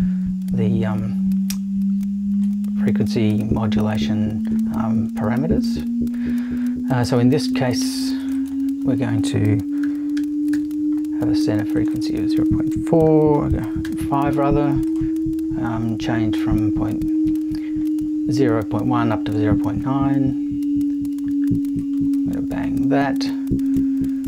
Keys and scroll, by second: 9.6-11.0 typing, 12.8-14.3 typing.